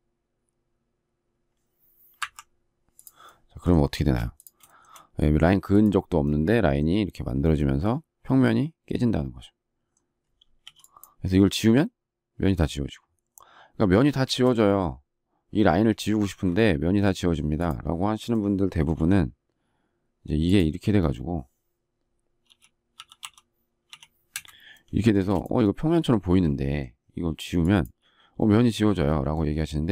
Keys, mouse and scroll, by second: 4.0 space, 4.6 shift+middle click, 4.7 shift+double middle click, 14.2 space, 16.2 ctrl+z, 24.3 Return.